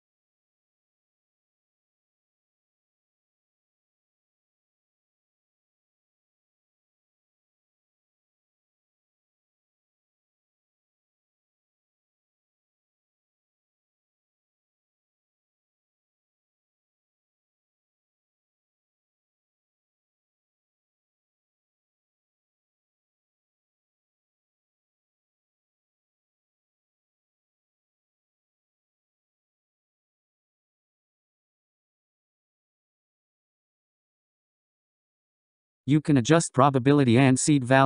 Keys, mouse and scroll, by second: 3.1-4.4 scroll down 10, 4.4-6.0 scroll up 12, 6.2-7.2 scroll down 3, 7.2-8.0 scroll up 2, 8.0-8.8 scroll down 3, 9.0 click, 11.3 s, 21.2 g, 27.5-28.3 scroll up 2, 28.3-36.1 middle drag, 36.1 click, 37.7-37.8 scroll up 4.